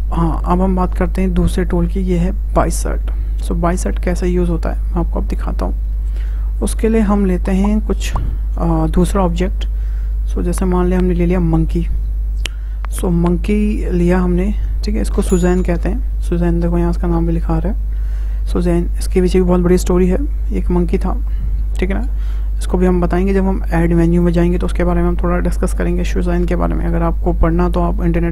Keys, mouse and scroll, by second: 1.1-4.1 drag, 6.2-6.8 drag, 6.8 Tab, 7.7 Delete, 9.5 shift+a, 14.0 scroll down 2, 14.2-19.2 middle drag.